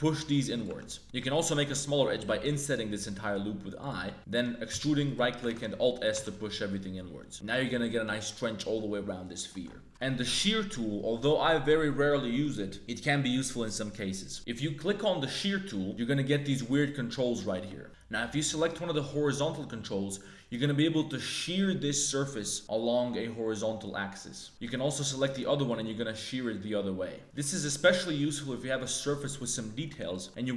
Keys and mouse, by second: 0.6 Tab, 1.0 ctrl+z, 1.0 3, 1.1 click, 2.2 i, 4.7 e, 5.4 alt+s, 6.1 Tab, 6.3-8.6 drag, 8.6 middle click, 9.9 Tab, 9.9 3, 15.3 click, 15.9 middle click, 16.7 middle click, 17.6 click, 19.2-24.5 drag, 24.6 click, 25.7-27.2 drag, 27.2 middle click, 27.2 z, 27.6-28.7 middle drag, 29.5 click, 30.1 middle click.